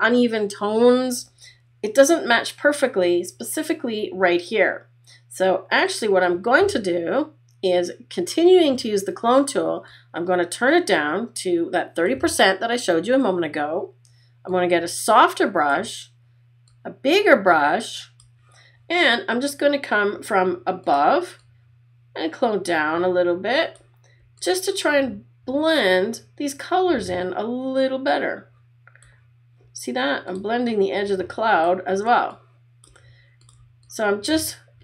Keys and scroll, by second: 32.1 space.